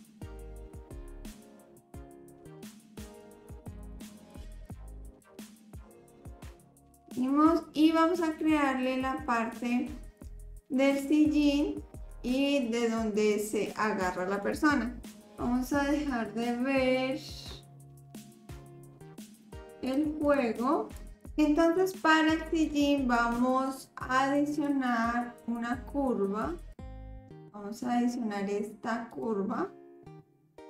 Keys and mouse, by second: 3.8 click, 4.3 click, 4.7-6.2 middle drag, 6.5 Tab, 19.4-20.3 drag, 20.9 click, 24.7-29.2 drag.